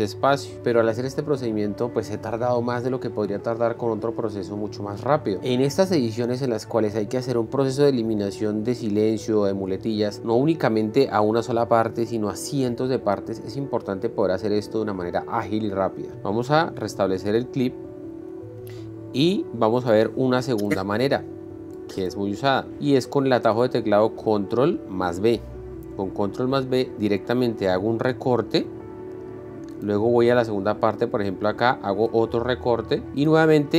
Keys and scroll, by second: 0.2 Delete, 16.8 ctrl+z, 28.3 ctrl+b, 32.4 ctrl+b.